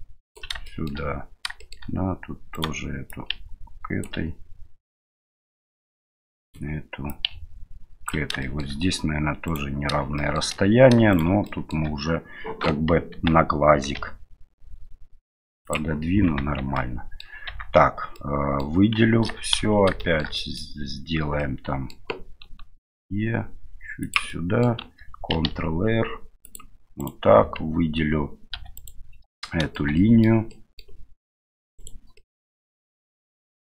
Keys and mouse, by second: 0.7 shift+middle click, 1.7 shift+middle click, 2.5 right click, 3.1 click, 6.4 right click, 7.1-8.1 ctrl+drag, 8.5 shift+middle click, 9.5 right click, 10.2 shift+middle click, 11.1 shift+right click, 11.4 shift+middle click, 13.1 g, 16.6 Tab, 16.7 middle click, 17.5 Tab, 18.1 middle click, 19.0 a, 19.6 a, 20.0 shift+middle click, 20.4 middle click, 21.4 middle click, 22.3 e, 24.4 middle click, 25.5 ctrl+r, 28.6 2, 28.8 right click, 29.4 middle click, 30.0 shift+middle click, 30.5 shift+middle click, 31.8 shift+right click, 32.2 shift+middle click, 32.6 shift+middle click, 33.2 shift+middle click.